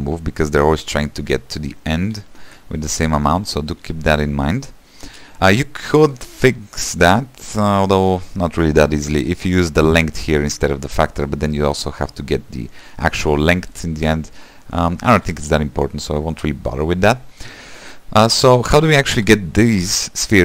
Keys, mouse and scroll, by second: 0.4-1.0 scroll down 1, 1.0-1.3 scroll down 1, 2.6 ctrl+z, 3.0-3.4 scroll up 2, 3.4 shift+middle click, 4.2 Tab, 4.9 scroll up 1, 5.2 space, 15.2-15.5 scroll up 1, 15.5 space, 18.0 space, 18.9-20.4 scroll up 2.